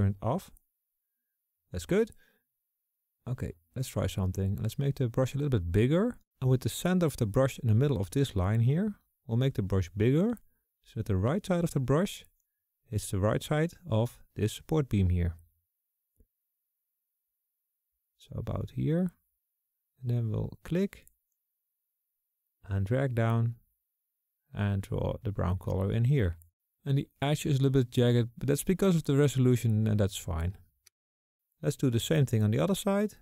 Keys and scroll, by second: 3.3 KP_5, 9.3-13.5 typing, 17.9 [.